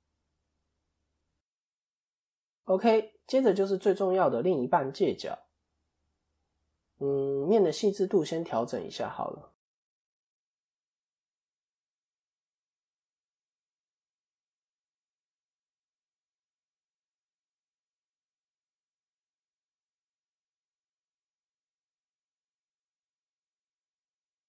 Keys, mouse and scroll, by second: 0.4 click, 2.2 KP_7, 3.4-5.2 scroll up 1, 5.7 click, 6.1 middle click, 6.7-7.7 scroll down 3, 7.0 middle click, 9.7 click, 9.8 click, 17.7 click, 19.5-20.1 scroll up 3, 19.8 middle click.